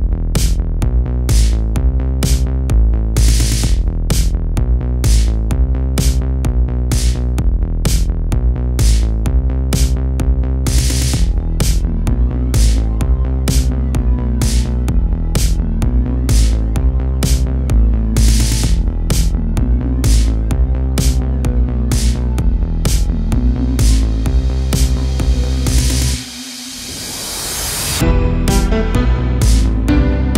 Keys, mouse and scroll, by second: 2.4-4.1 shift+middle drag, 4.1-6.6 ctrl+drag, 6.6 ctrl+z, 7.3-8.4 drag, 8.4 ctrl+z, 8.9-10.6 drag, 10.6-12.7 shift+middle drag, 12.7-14.7 ctrl+drag, 14.7 ctrl+z, 15.3-17.8 ctrl+drag, 17.8-21.9 middle drag, 21.9-22.9 ctrl+drag, 22.9 middle click, 23.6 ctrl+z, 24.3 ctrl+click, 25.2 ctrl+z, 25.8-26.9 ctrl+drag, 26.9 ctrl+z, 27.6-28.6 ctrl+drag, 28.6-30.3 middle drag.